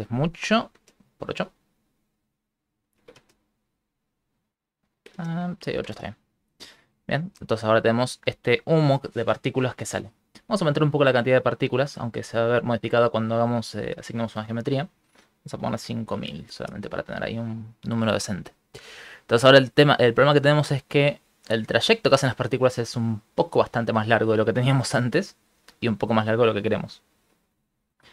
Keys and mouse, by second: 0.1 click, 1.7 click, 4.5 click, 5.7 click, 11.1 middle click, 11.9 click, 14.7 click, 19.5 ctrl+middle click, 22.2 ctrl+middle click, 25.4 ctrl+middle click, 26.2 ctrl+middle click.